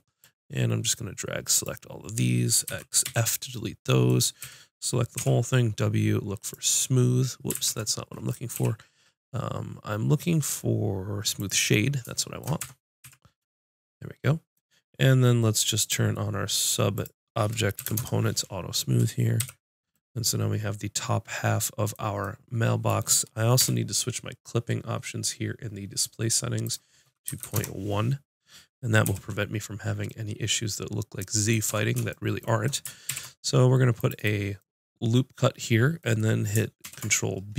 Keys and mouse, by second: 2.7 x, 4.4 a, 5.1 w, 5.8-8.6 drag, 5.8 right click, 6.8-8.5 right drag, 7.5 ctrl+z, 8.6 w, 12.6 Tab, 13.0 z, 15.8-18.8 drag, 19.3 KP_5, 23.5 n, 26.6-28.2 drag, 29.0 n, 31.6 Tab, 33.0 ctrl+r, 34.6 click, 36.8 ctrl+b.